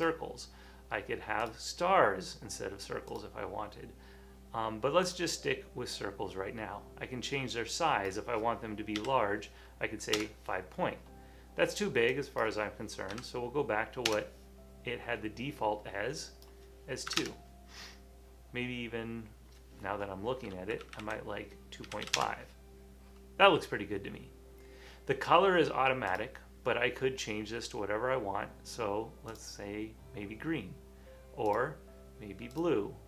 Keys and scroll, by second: 9.1 5, 10.2 Return, 13.2 3, 17.2 Return, 20.9 Left, 21.6-22.6 typing.